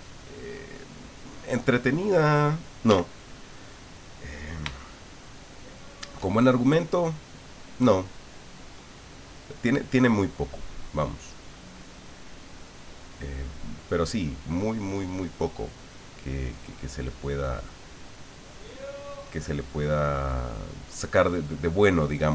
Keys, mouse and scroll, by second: 0.4 click, 1.5 click, 2.9 f, 4.2 click, 4.8 shift+middle click, 5.7 shift+middle click, 8.0-11.3 drag, 13.3-14.8 drag, 15.9-17.3 drag, 17.5-18.7 drag, 19.1 click, 20.2 middle click, 21.2 middle click.